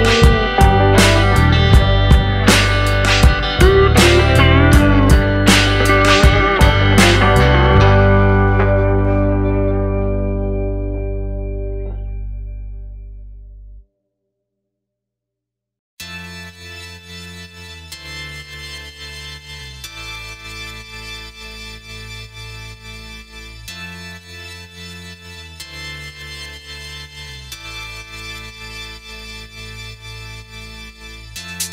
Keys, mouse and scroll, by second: 0.3 scroll up 1, 0.4 middle click, 1.2 click, 1.5 alt+click, 2.5 ctrl+b, 6.1 middle click, 7.2 scroll up 2, 7.4 middle click, 9.2 middle click, 10.0 middle click, 11.7 click, 13.7 click, 17.0 click, 21.8 middle click, 22.6 scroll up 1, 22.8 scroll down 1, 24.3 click, 26.1 Tab, 26.6 scroll down 1, 26.9 middle click, 28.6 middle click, 29.3 Tab, 29.6 scroll down 2, 30.2 middle click, 30.4-30.7 scroll up 4, 30.7 scroll down 1, 31.0 middle click.